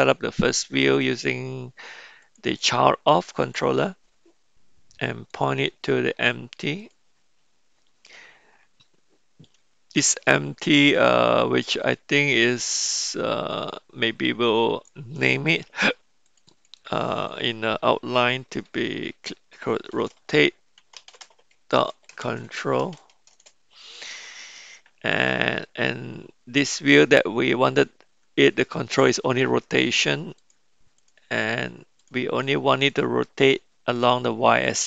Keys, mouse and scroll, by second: 2.2-3.7 drag, 5.3 click, 13.1-15.0 drag, 16.6-24.1 drag, 26.9 click, 29.8 click, 30.3 drag, 30.9 click, 31.9 drag, 32.4 drag, 32.9 click, 34.0 click, 34.6 click.